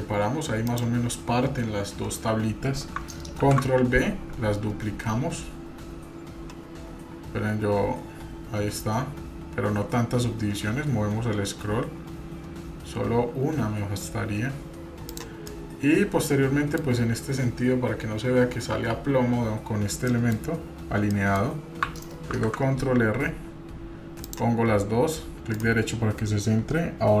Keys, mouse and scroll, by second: 0.0 s, 3.4 ctrl+b, 15.5-16.8 middle drag, 20.1 middle click, 21.1 middle click, 22.3 ctrl+r.